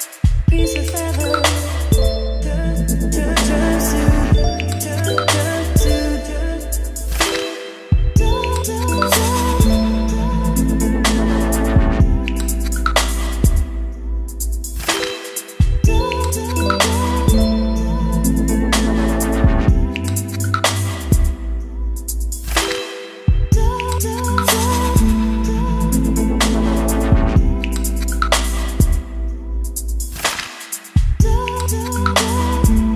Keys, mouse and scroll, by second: 0.0-5.1 drag, 4.9-5.7 typing, 6.8-15.7 drag, 16.0 ctrl+space, 17.0 click, 17.4-21.5 typing, 21.9 click, 22.7 ctrl+c, 26.0-27.0 drag, 27.0 Tab, 28.1-29.7 typing, 30.1 Return, 31.7 ctrl+v, 32.5 >.